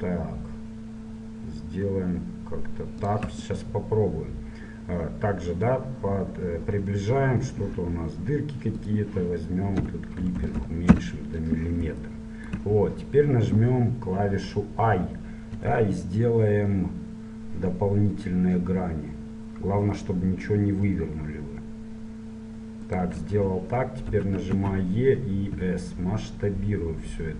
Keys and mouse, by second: 4.3-7.4 middle drag, 8.9-10.6 drag, 10.6 KP_0, 12.1-15.0 middle drag, 15.0 i, 24.2 e.